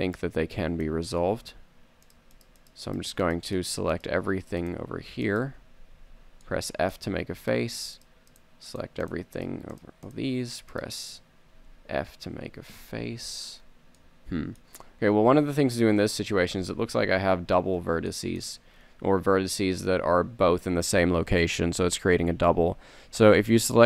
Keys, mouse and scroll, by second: 0.1 click, 6.0 f, 11.7 f, 13.2 z, 14.0 super+middle click, 16.6 KP_3, 17.4 KP_1, 17.7 KP_1, 20.2 a, 21.9 a, 22.3 a, 22.7 a.